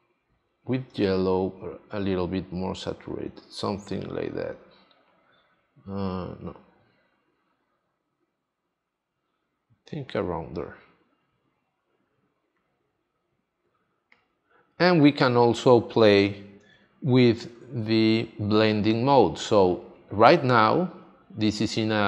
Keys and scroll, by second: 16.6 super+d, 17.7 space.